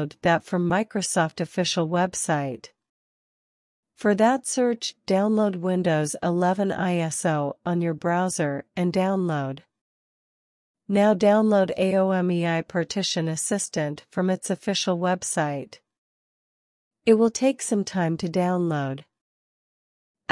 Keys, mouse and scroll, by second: 11.0 click, 12.6 click, 13.9 click, 16.5 click.